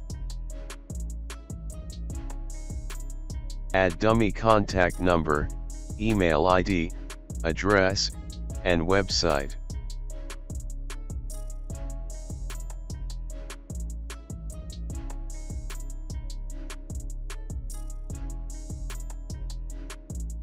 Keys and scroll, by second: 0.5 ctrl+space, 1.1 ctrl+z, 2.0 space, 3.2 KP_Add, 3.5-5.2 typing, 6.5-16.6 typing, 8.1 ctrl+a, 10.6 ctrl+a, 16.2 Right, 16.3 Right, 16.9 alt+space, 19.4 BackSpace, 19.5 BackSpace, 19.9 Right, 20.0 Right, 20.0 Left.